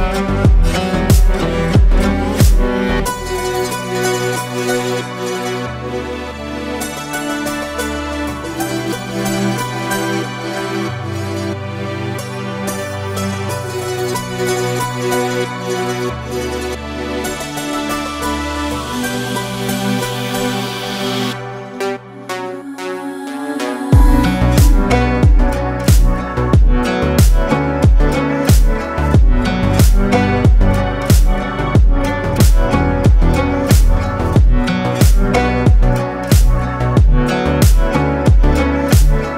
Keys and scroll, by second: 9.9 ctrl+space, 10.6 ctrl+space, 11.2 ctrl+space, 17.5 ctrl+z, 18.8 ctrl+z, 28.9 ctrl+space, 29.9 ctrl+space, 30.5 ctrl+space.